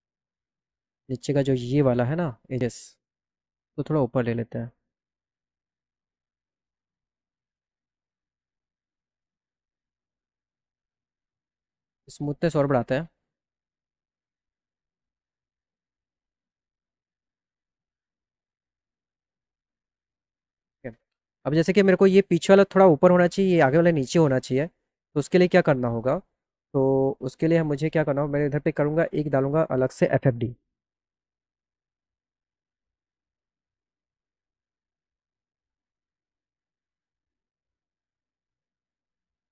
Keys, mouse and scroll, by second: 0.6-2.1 drag, 3.6-4.8 drag, 6.7 right click, 7.1 click, 9.1 click, 10.0 click, 12.5 click, 12.9 right click, 13.6 right click, 19.4 click, 19.4 right click, 24.4 click, 29.0 click, 31.8 f, 34.2 click, 35.5 click, 39.2 right click.